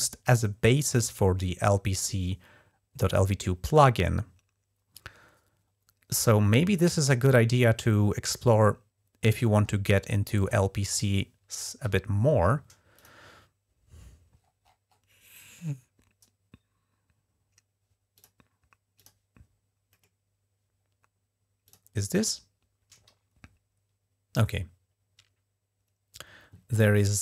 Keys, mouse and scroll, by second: 4.6-5.2 scroll down 1, 7.3-9.1 scroll down 15, 9.5-10.4 scroll up 6, 11.6 F11, 12.8 click, 14.2-15.1 scroll up 1, 17.9 click, 18.8 click, 19.7-21.5 middle drag, 21.5 click, 21.7 click.